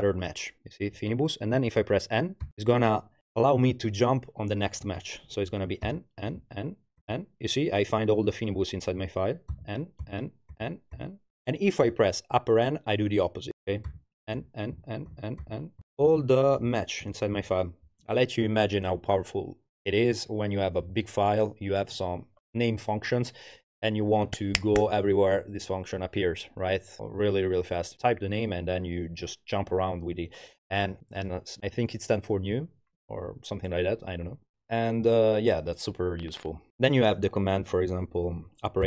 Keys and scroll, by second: 2.4 n, 5.9 n, 9.5 n, 13.9 shift+n, 14.8 shift+n, 15.4 shift+n, 17.4 shift+n.